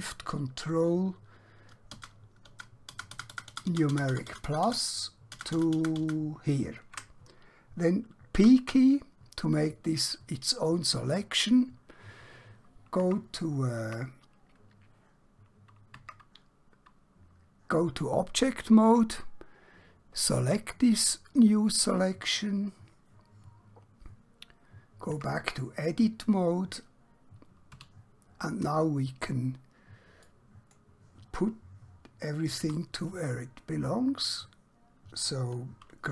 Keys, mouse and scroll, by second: 1.9 ctrl+shift+KP_Add, 8.4 p, 9.5 click, 12.9 Tab, 21.2 click, 25.2 Tab, 27.7 1, 28.8 scroll up 1, 30.2 click, 32.7 e, 34.3 right click.